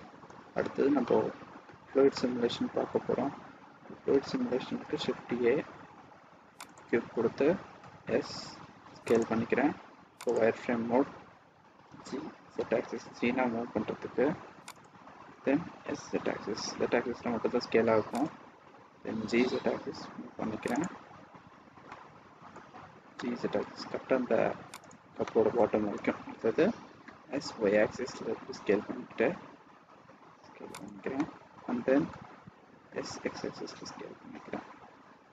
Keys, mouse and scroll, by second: 0.5-1.3 scroll down 2, 1.0 middle click, 2.1 middle click, 4.7 shift+a, 7.7 s, 10.2 click, 11.7 g, 15.7 s, 21.7 middle click, 23.0 g, 25.2 middle click, 26.0 scroll down 1, 27.0 s, 31.0 middle click, 32.7 s.